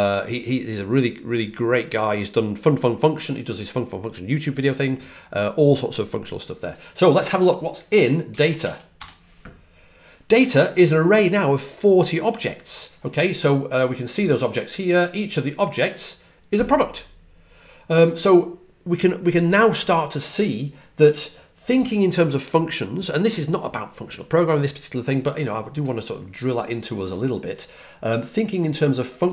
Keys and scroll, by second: 8.0-8.9 typing.